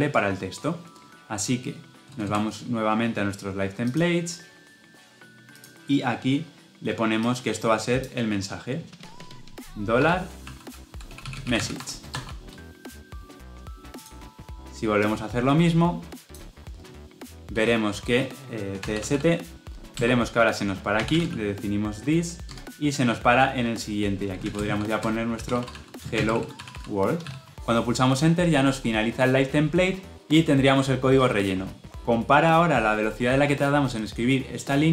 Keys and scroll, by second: 19.8 Return.